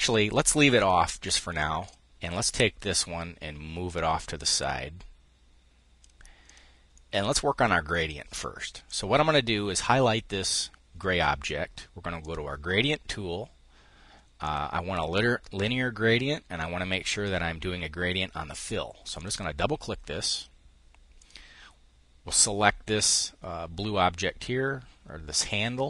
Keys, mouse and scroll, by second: 0.8 click, 6.6-7.7 drag, 8.8-11.8 drag, 12.0 click, 14.1 click, 18.8 click, 20.8 click.